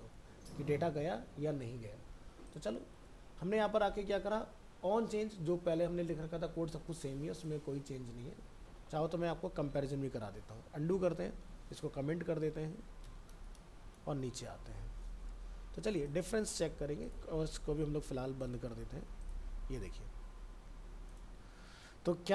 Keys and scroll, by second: 9.8 ctrl+z, 13.3 ctrl+Return, 13.9 ctrl+v.